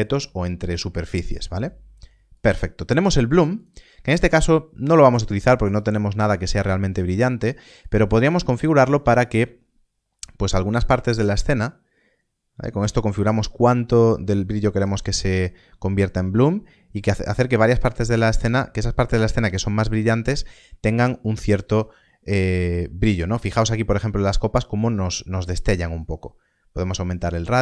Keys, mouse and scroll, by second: 2.3 click, 7.7 shift+click, 16.3 click, 22.0 middle click, 25.9 middle click.